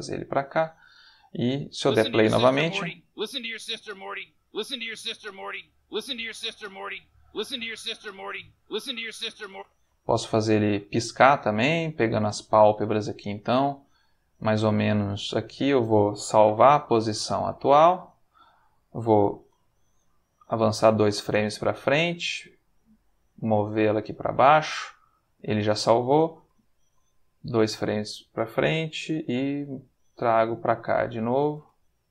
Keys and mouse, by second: 0.7 click, 1.4 space, 9.5 space, 11.1 click, 13.2-15.7 drag, 16.4 i, 17.8 click, 19.4 Right, 21.3 i, 22.9 g, 24.1 click, 26.4 Right, 29.3 g, 31.6 space.